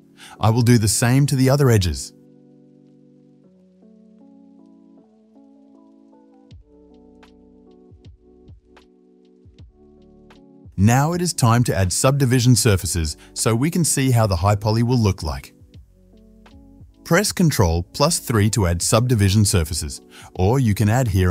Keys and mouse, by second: 1.1 ctrl+b, 2.0 shift+middle click, 2.6 click, 2.7-7.5 alt+shift+middle drag, 3.5 KP_3, 3.9 shift+z, 4.7 ctrl+b, 5.8 shift+z, 6.2 click, 6.7 ctrl+b, 7.5 click, 7.5 alt+shift+middle click, 7.8 alt+shift+click, 7.9-9.2 ctrl+middle drag, 8.1 ctrl+b, 9.8 ctrl+b, 10.6 Tab, 10.6-11.9 middle drag, 12.7-21.3 middle drag, 17.7 ctrl+3.